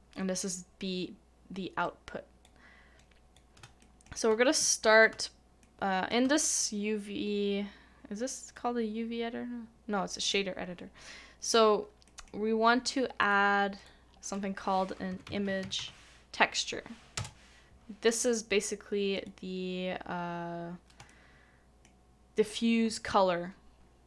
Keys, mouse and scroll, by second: 3.8 shift+middle click, 11.3 shift+middle click, 15.8 typing, 17.1 Return, 21.0 Return, 21.1 shift+middle click.